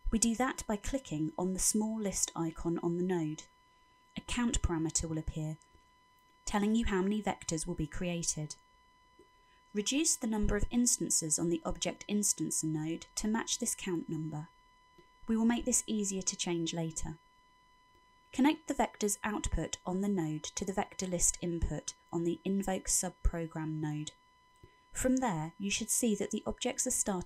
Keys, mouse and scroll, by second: 3.1 click, 12.1 click, 19.4 click, 24.2-25.3 scroll up 5, 25.4 shift+middle click, 26.1 middle click.